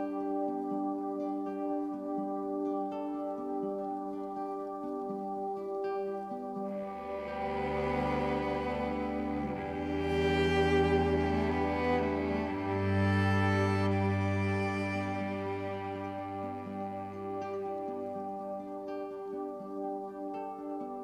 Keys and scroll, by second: 1.8-2.6 typing, 8.2-9.2 typing, 13.8 super+c, 14.3 super+f.